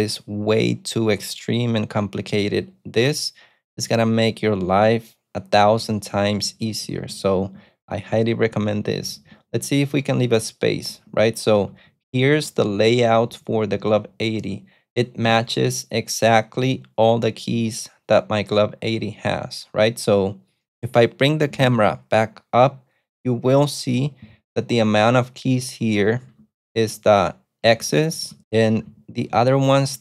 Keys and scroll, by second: 5.6-15.0 typing, 26.3-30.0 typing.